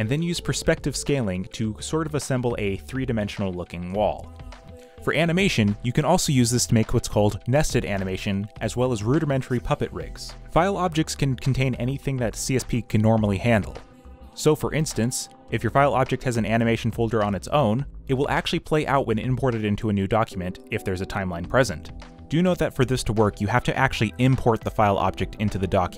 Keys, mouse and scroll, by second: 4.6 Return, 6.2 b, 13.4 v, 15.6 Escape, 20.1 q.